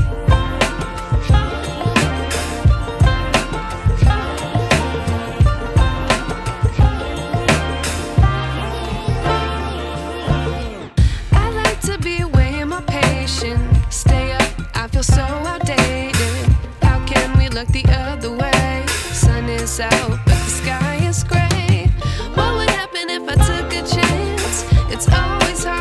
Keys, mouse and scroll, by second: 0.7-6.3 drag, 9.9 click, 11.8 m, 12.4-14.3 drag, 18.7 Caps_Lock, 21.2 click, 21.2 click.